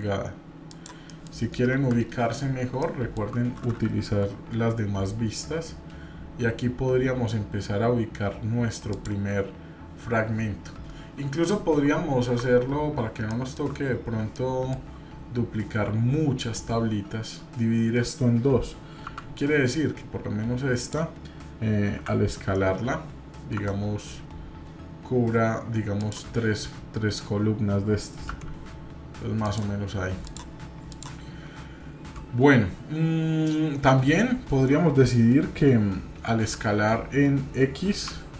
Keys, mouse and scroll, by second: 1.0 middle click, 1.7 KP_7, 2.3 scroll up 1, 2.8-3.3 shift+middle drag, 4.0 g, 12.5-13.0 scroll down 1, 13.3 shift+middle click, 13.9-14.2 scroll down 1, 14.4-14.9 shift+middle drag, 30.2 click, 30.9 click, 33.6-33.9 scroll up 3.